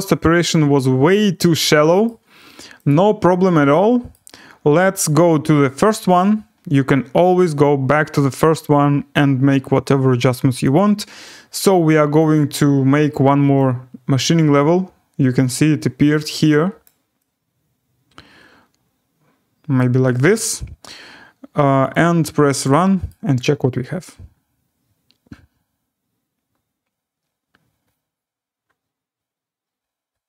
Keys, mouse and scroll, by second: 2.0 right click, 2.8 click, 4.1 right click, 5.9 click, 7.5-7.9 scroll, 8.3 scroll, 10.7 click, 13.5 click, 16.8 click, 19.7 click, 20.4-20.7 scroll, 21.9 click, 23.1-23.5 scroll, 24.3 scroll.